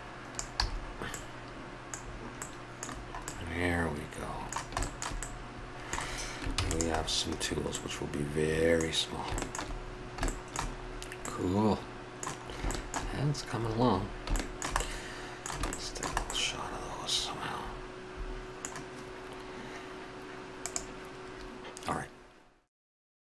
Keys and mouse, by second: 0.3-0.8 drag, 0.6 a, 3.8 middle click, 4.2-6.5 middle drag, 6.5 ctrl+s, 11.4-11.9 middle drag, 15.0-17.0 middle drag, 17.6 middle click, 20.6 click.